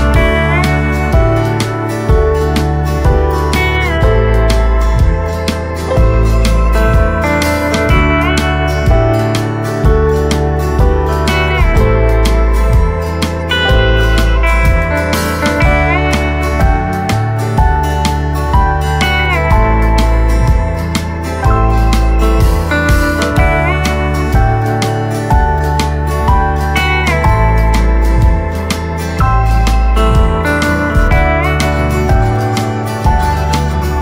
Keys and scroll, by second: 2.1 r, 2.2 Return, 3.4 KP_4, 7.9 v, 12.5 Tab, 14.7 space, 15.2 space, 16.1 Tab, 17.6 Tab, 23.7 Tab, 31.3 z.